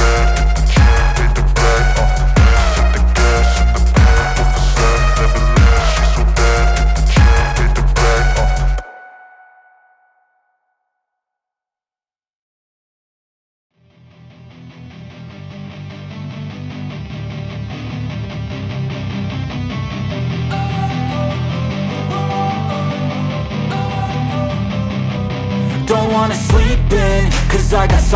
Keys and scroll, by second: 0.1 ctrl+s, 3.6 ctrl+z, 7.2-8.6 typing, 11.2 space, 11.4 KP_Subtract, 12.7-16.1 typing, 16.5 Return, 17.8 KP_Divide, 17.8 n, 18.1 ctrl+s, 22.3 alt+Up, 23.3 ctrl+s.